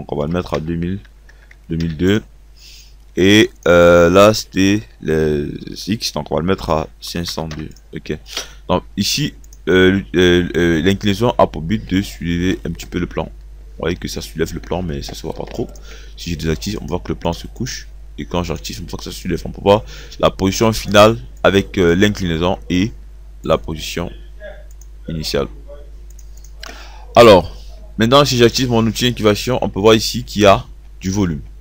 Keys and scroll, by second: 0.3 KP_0, 1.5 KP_2, 6.5 5, 7.2 0, 7.5 2.